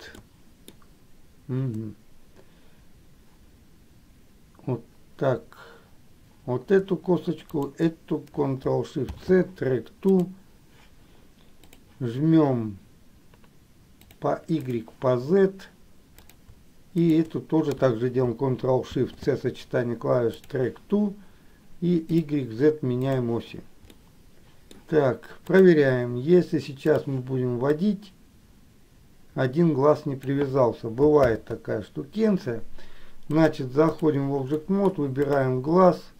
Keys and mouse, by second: 0.4 shift+middle click, 7.7 shift+click, 14.8 click, 17.2 shift+click, 22.3 click, 24.2 middle click, 28.0-30.4 drag, 31.4 ctrl+z, 33.4 click, 34.7 middle click, 35.5 click.